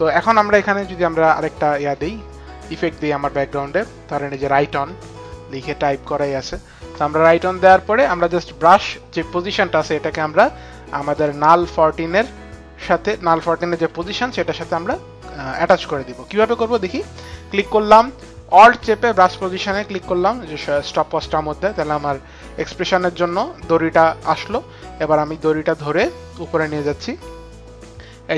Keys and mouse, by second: 1.1 click, 10.8 click, 13.5 p, 16.5 click, 19.1 alt+click, 21.7 alt+click.